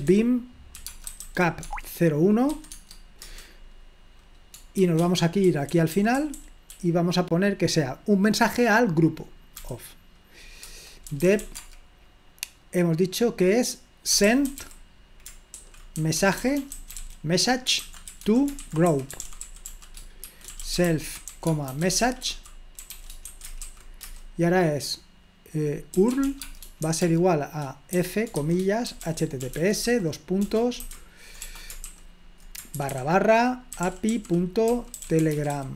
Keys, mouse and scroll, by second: 0.0-3.2 typing, 4.8-7.2 typing, 9.6 typing, 10.7 Return, 10.8-11.9 typing, 13.9-24.1 typing, 25.7-31.8 typing, 32.9-35.7 typing.